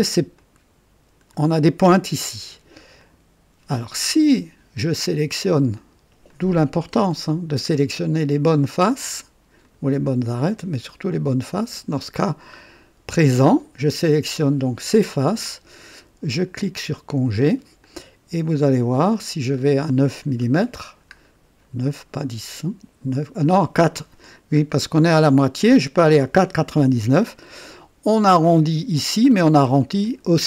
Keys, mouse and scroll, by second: 0.3-1.4 drag, 2.9 click, 4.1-4.8 drag, 5.7 click, 6.3 click, 8.2 ctrl+click, 8.7 ctrl+click, 9.6 ctrl+click, 10.2-11.1 ctrl+drag, 11.7 ctrl+click, 12.1-13.0 ctrl+drag, 13.5 ctrl+click, 16.5 click, 17.8-18.9 drag, 19.5 scroll up 2, 20.4-20.7 scroll up 2, 21.1-21.4 scroll down 2, 21.8-22.4 scroll down 3, 24.5 scroll up 2, 27.2-28.4 drag, 30.0-30.4 drag.